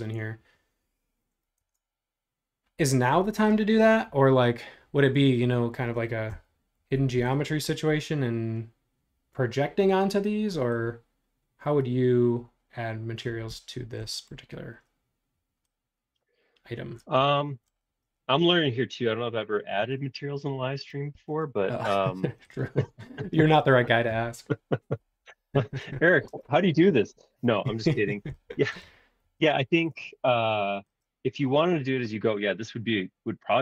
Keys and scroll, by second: 1.6 super+Tab, 6.7 shift+g, 19.8 super+z, 21.1 shift+super+z, 29.3 shift+g.